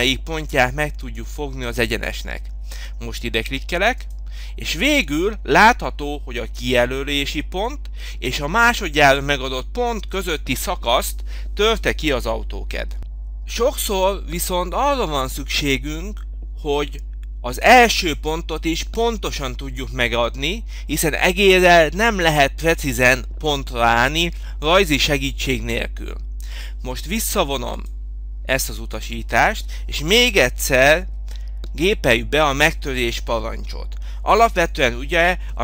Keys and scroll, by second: 30.8 m.